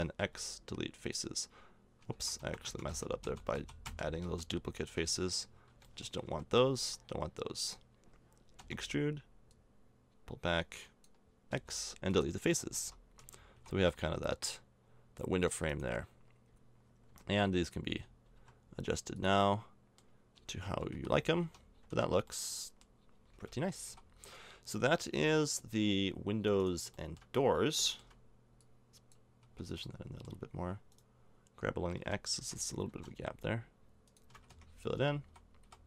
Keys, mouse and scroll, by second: 0.2 x, 2.1 ctrl+z, 2.4 ctrl+z, 2.7 ctrl+z, 2.9 ctrl+z, 3.2 ctrl+z, 3.5 ctrl+z, 3.9 ctrl+z, 4.2 ctrl+z, 5.7 b, 6.3 b, 7.4-9.5 middle drag, 8.6 e, 11.5 x, 12.6 a, 12.8 Tab, 13.2 z, 13.6 a, 13.9 middle click, 15.7 right click, 16.2 right click, 17.3 g, 20.3 z, 20.7 z, 20.9 a, 21.5 Tab, 21.7 middle click, 21.9 Tab, 23.3 a, 23.9 a, 26.0 middle click, 26.6 right click, 27.8 middle click, 28.6 click, 29.4 a, 30.0 middle click, 30.9 right click, 32.0 g, 34.3 shift+a, 35.0 Tab, 35.3 a, 35.6 a.